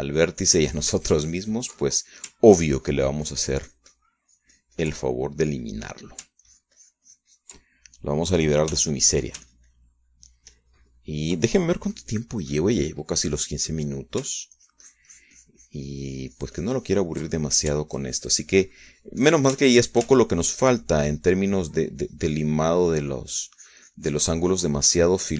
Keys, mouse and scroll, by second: 4.2-7.1 ctrl+drag, 7.2 ctrl+middle click, 8.0-9.8 ctrl+drag, 10.3 f, 10.8-12.9 ctrl+drag, 13.5 click, 14.1 click, 14.7-15.9 drag, 16.2-19.2 ctrl+drag, 19.4 ctrl+middle click, 19.5-21.7 ctrl+drag, 21.8 ctrl+shift+click, 22.7-25.3 ctrl+drag.